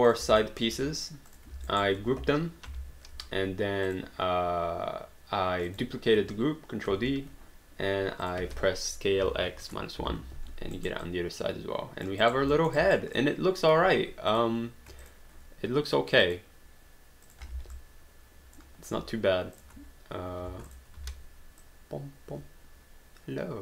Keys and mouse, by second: 0.1 shift+click, 0.4 alt+middle click, 1.0 shift+click, 1.7 alt+right click, 2.7 ctrl+g, 3.9 click, 5.7 click, 6.9 ctrl+d, 8.2 click, 9.5 1, 9.6 Return, 10.2 alt+d, 10.8 alt+right click, 11.1 alt+click, 12.2 alt+right click, 12.6 alt+middle click, 12.8 alt+right click, 13.3 alt+click, 14.3 click, 15.0 shift+click, 16.2 click, 17.3 click, 17.5 alt+d, 17.7 alt+click, 19.6 click, 21.0 shift+click, 21.4 e, 21.7 click.